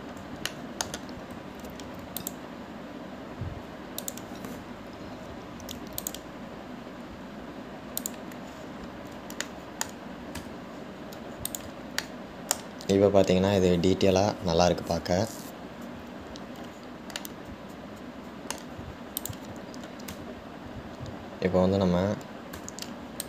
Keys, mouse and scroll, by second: 1.1-1.7 scroll up 1, 1.7-3.0 shift+middle drag, 3.0 ctrl+r, 9.8-10.3 scroll down 5, 10.7-11.8 shift+middle drag, 11.8 Tab, 12.0-12.7 scroll down 1, 12.7 click, 13.2-16.3 shift+middle drag, 18.4-20.4 middle drag, 20.4 click, 22.7-23.2 scroll up 2.